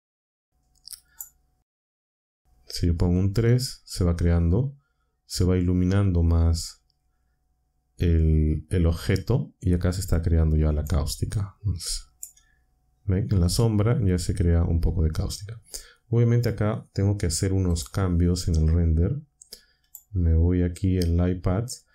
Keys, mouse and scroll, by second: 1.0 click, 3.0 3, 3.3 Return, 10.8-12.3 drag, 17.7 click, 19.8 click, 21.2 scroll down 1.